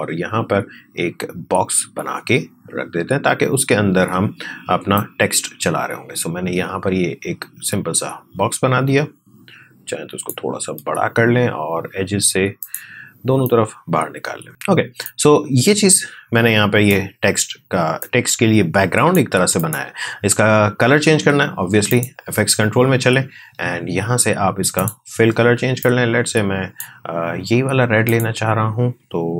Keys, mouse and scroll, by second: 4.9-19.6 drag, 21.9 click, 23.4-24.7 scroll down 1, 24.7-28.0 drag.